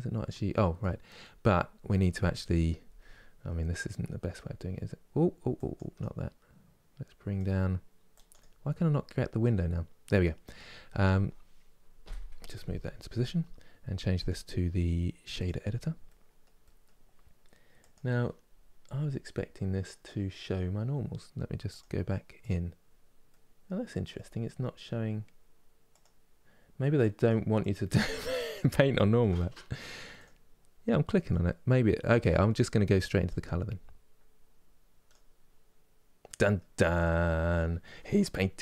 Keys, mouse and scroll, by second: 4.1-21.4 drag, 22.1 click, 22.9-25.7 middle drag, 25.7 click, 26.6 click, 28.0-29.9 middle drag, 29.9 click, 34.8 click, 35.9 middle click, 36.5-36.9 scroll up 3, 37.2-38.6 middle drag.